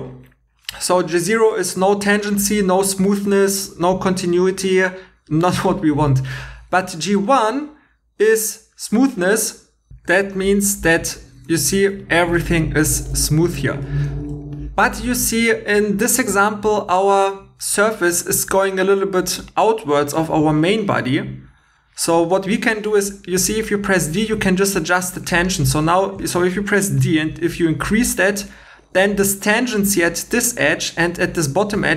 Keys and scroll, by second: 11.8 shift+e, 13.0 shift+e, 27.0 d.